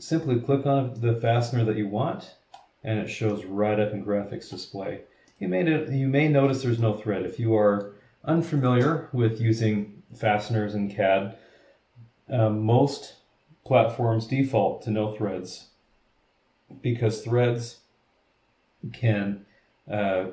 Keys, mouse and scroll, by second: 0.1 scroll down 1, 0.5 scroll up 1, 1.0-2.7 middle drag, 1.3-2.7 drag, 1.3-2.7 right drag, 3.3-4.7 middle drag, 3.4-4.7 drag, 3.4-4.7 right drag, 5.2-6.7 middle drag, 5.3-6.7 drag, 6.7 scroll up 1, 6.8-8.0 middle drag, 8.5 click.